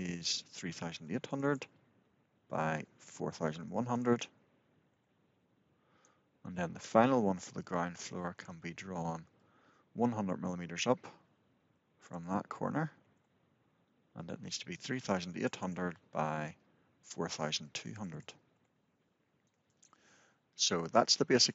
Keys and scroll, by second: 4.6 Return, 13.0 Return, 18.4 Return.